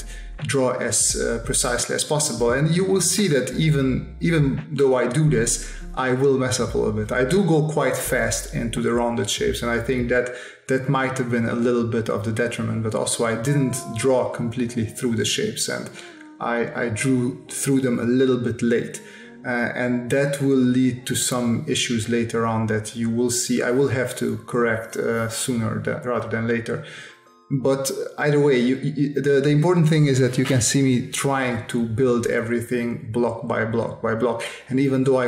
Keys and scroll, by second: 2.6 space, 5.1 space, 6.1 space, 7.2 space, 9.3 space, 11.1 space, 12.4 space, 16.7 space, 20.2 space, 22.1 space, 24.4 space, 27.2 space, 28.4 space, 29.6 space, 31.2 s, 34.2 space.